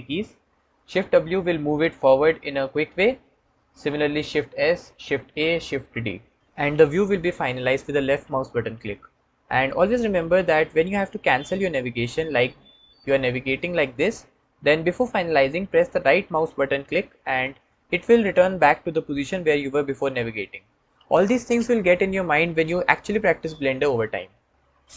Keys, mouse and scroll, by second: 3.2-5.8 shift+drag, 12.3-15.1 drag, 15.9 right click.